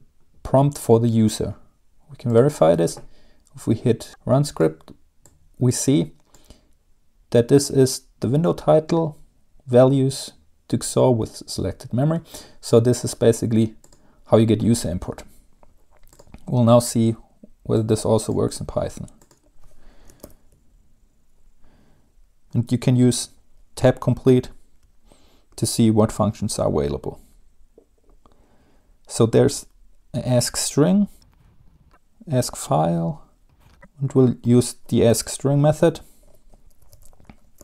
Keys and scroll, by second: 20.0-20.9 typing, 37.1-37.6 typing, 37.5 Home.